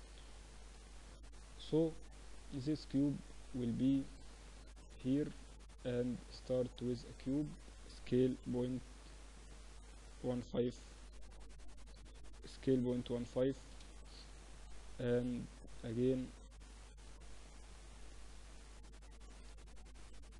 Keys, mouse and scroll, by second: 2.0 KP_7, 5.0-6.7 drag, 5.3 shift+a, 8.0 s, 12.3 s, 17.3-19.2 drag.